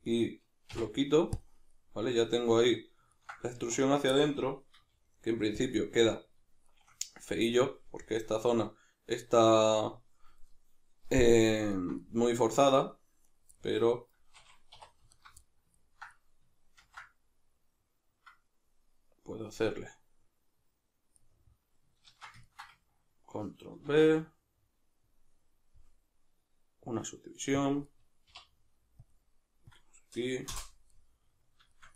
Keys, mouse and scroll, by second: 0.7 x, 1.7-3.6 middle drag, 3.6 1, 3.8 right click, 4.2-4.8 middle drag, 4.8 g, 5.7 click, 5.8-13.2 middle drag, 13.2 right click, 13.6-15.2 middle drag, 14.8 2, 15.2 alt+right click, 15.4-20.7 middle drag, 16.8 ctrl+b, 20.7 click, 22.1 ctrl+z, 22.4 ctrl+middle click, 23.9 ctrl+b, 27.7 click, 27.9 middle click, 28.3 k, 30.6 Return, 30.9 middle click, 31.7-31.9 shift+middle drag.